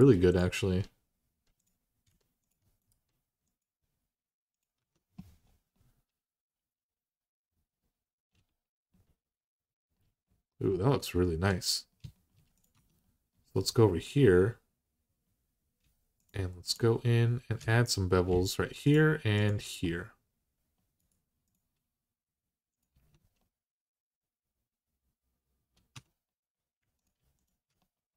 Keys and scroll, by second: 4.6 Tab, 12.5 Tab, 22.7 Tab, 25.7 Tab.